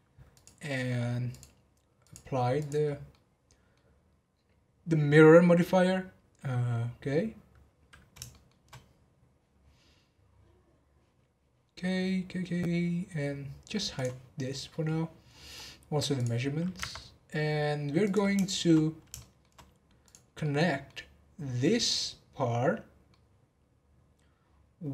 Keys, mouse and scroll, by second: 0.3 click, 1.3 click, 2.0-3.1 drag, 3.1-6.2 middle drag, 8.3-11.3 shift+middle drag, 12.8-13.3 scroll down 2, 13.9 click, 14.7-15.3 middle drag, 15.3 scroll up 4, 16.1 click, 18.0 click, 18.4 shift+middle click, 18.7 scroll up 2, 19.1 shift+middle click, 20.0 click, 20.4-24.9 middle drag.